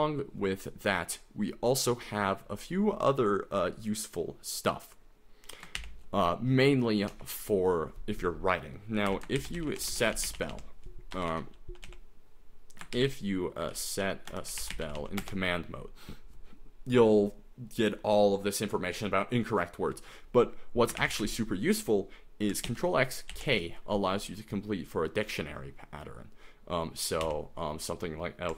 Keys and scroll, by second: 5.8 shift+o, 7.1 Escape, 8.9-15.5 typing, 11.3 Escape, 21.0 shift+o, 22.7 ctrl+x, 23.3 ctrl+k, 27.2 l.